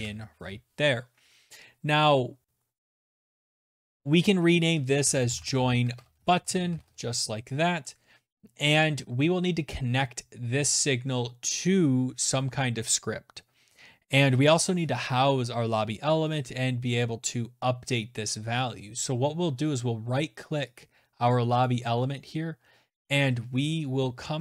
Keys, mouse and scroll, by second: 0.3-1.0 typing, 2.5-6.1 typing, 2.8 click, 2.9 click, 5.1 click, 8.5 typing, 18.7 right click, 19.7 click, 20.5 right click, 24.1 click.